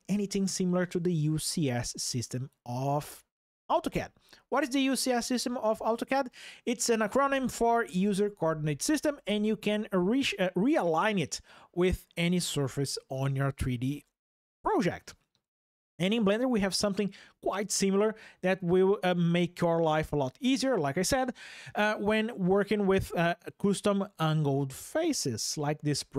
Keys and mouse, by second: 21.2 click.